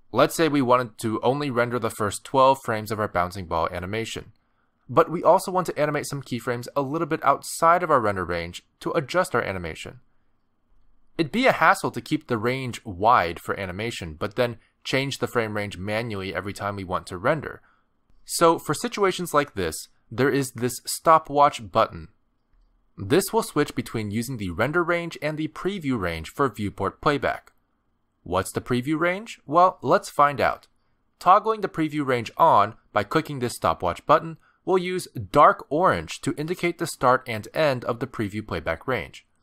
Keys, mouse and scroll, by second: 1.1 space, 2.7 click, 5.3 space, 7.3 space, 7.6 click, 11.1 click, 11.3 space, 14.5 space, 14.7 click, 19.5 click, 31.6 click.